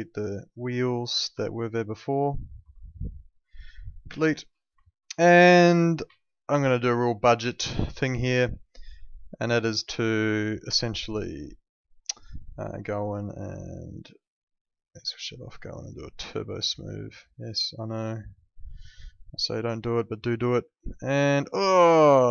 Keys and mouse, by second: 0.8 alt+middle click, 1.8 ctrl+click, 2.8 alt+middle click, 4.0 Delete, 4.8 alt+middle click, 5.7 alt+middle click, 6.2 alt+middle click, 6.8 alt+middle click, 7.5 alt+middle click, 12.6 click, 19.8 click, 20.7 alt+middle click.